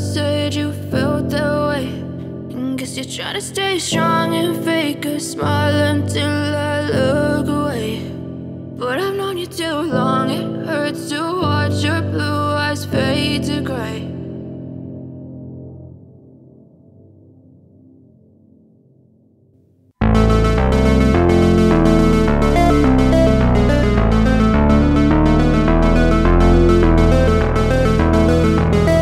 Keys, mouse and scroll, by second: 0.0-1.8 drag, 2.4 click, 6.0 click, 7.1 click, 9.2-10.2 drag, 11.5-14.5 drag, 15.0-18.0 drag, 20.1 space, 23.4-26.4 scroll down 1, 27.3 space.